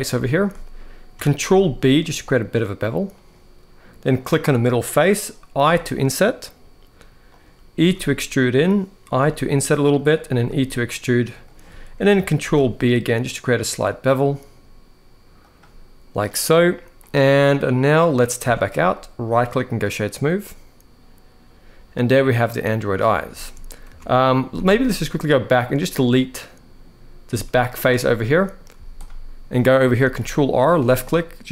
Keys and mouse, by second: 0.0 shift+middle click, 1.2 ctrl+b, 3.9 click, 5.4 i, 7.5 e, 8.3 click, 8.9 i, 10.1 e, 11.2 click, 12.2 ctrl+b, 16.7-17.9 middle drag, 18.1 Tab, 19.1-19.5 right drag, 20.2-22.8 middle drag, 23.1 shift+middle drag, 23.6 Tab, 23.9 middle click, 24.2 z, 24.8 middle click, 25.5 click, 25.9 middle click, 27.0 x, 28.0 middle click, 28.5 z, 29.7 ctrl+r.